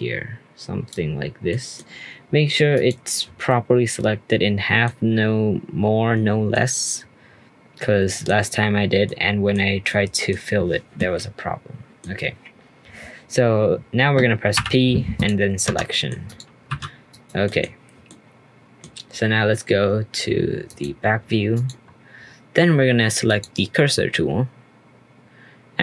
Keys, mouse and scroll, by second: 1.5-2.7 middle drag, 2.7 click, 3.2 scroll down 2, 3.4-5.0 middle drag, 5.0-6.3 scroll up 3, 6.3 scroll down 1, 6.5-8.6 middle drag, 8.6-9.0 scroll down 1, 9.0-14.1 middle drag, 14.5 p, 15.6 Tab, 15.9-16.3 middle drag, 16.3 click, 16.7 r, 17.4 middle drag, 17.6-18.0 scroll down 3, 18.0-20.6 middle drag, 20.6 click, 21.1-21.5 scroll up 2, 21.5 click, 21.8-22.1 scroll up 1, 22.1-23.2 scroll down 2, 23.2-25.8 drag.